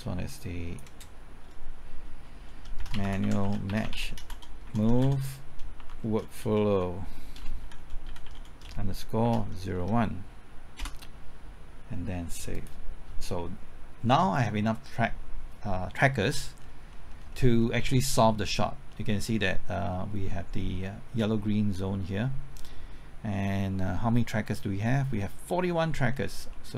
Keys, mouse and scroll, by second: 2.6-10.3 typing, 10.8 Return, 12.5 click, 16.6 scroll down 1, 16.9 middle click, 17.2-18.5 scroll up 1, 18.5-21.3 middle drag, 22.4-24.3 scroll up 1, 24.3 middle click, 26.1-26.5 scroll down 1, 26.5 middle click.